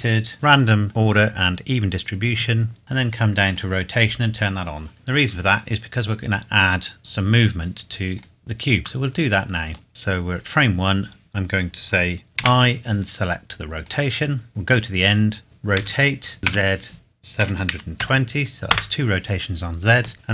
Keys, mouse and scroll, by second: 2.8 scroll down 1, 3.5 click, 5.7-6.0 scroll down 1, 8.2 click, 9.0 middle click, 12.4 i, 13.8 click, 15.8-18.0 typing, 18.7 KP_Enter.